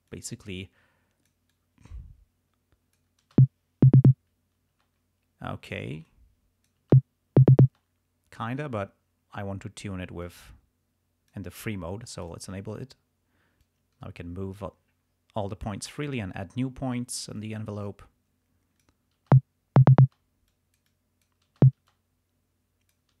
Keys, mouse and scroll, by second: 0.1-1.4 drag, 1.5-3.2 drag, 3.3 space, 4.7 space, 6.1 click, 6.8 space, 7.6 space, 10.2-11.5 drag, 12.2 click, 13.6-14.7 drag, 16.0 click, 17.4-19.0 drag, 19.2 space, 20.0 space, 20.5-21.5 drag, 21.6 space, 21.9-23.2 drag.